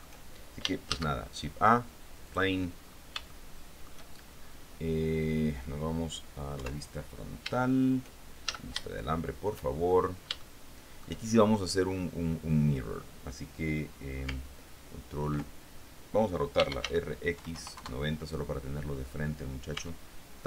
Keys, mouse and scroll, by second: 1.1 shift+a, 2.5 click, 2.7-3.5 scroll down 1, 3.5 shift+click, 4.2 shift+middle click, 6.7 KP_1, 8.6 shift+z, 9.1 shift+middle click, 9.9-10.6 shift+scroll up 4, 10.6 shift+middle click, 11.3-12.7 shift+scroll up 3, 16.5-17.9 typing, 19.9 Tab.